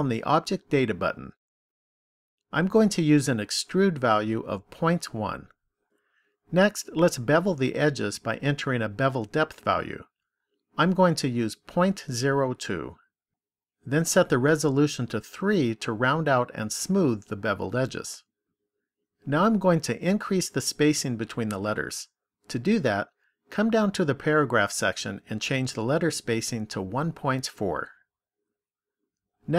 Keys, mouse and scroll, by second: 3.6 click, 9.7 click, 15.0 click, 15.4 click, 15.8 click, 21.8 click, 25.7 click.